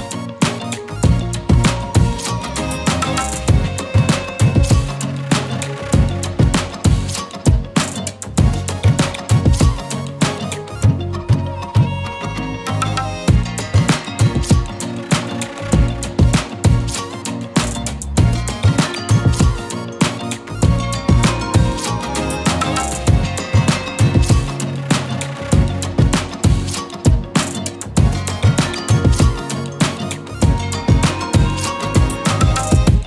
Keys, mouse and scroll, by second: 2.4 click, 5.1 scroll down 1, 5.4-6.3 typing, 5.7 click, 7.1 click, 7.7-11.1 typing, 7.8 click, 8.1 click, 8.7 click, 9.1 click, 9.9 click, 10.5 click, 12.0 click, 15.2-15.6 scroll down 1, 17.4 z, 17.8 click, 17.9-18.6 z, 18.2 space, 18.3 click, 23.6-25.1 typing, 23.9 click, 24.4 click, 24.9 click, 25.2 click, 29.5 z, 29.7-30.4 click, 30.0 space, 30.1 click.